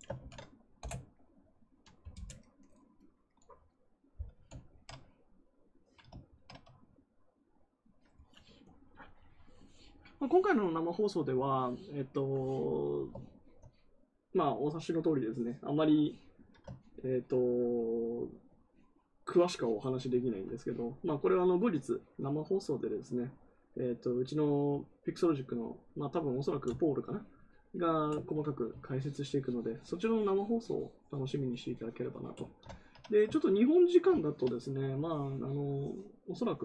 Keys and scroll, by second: 0.1 ctrl+v, 0.7 Return.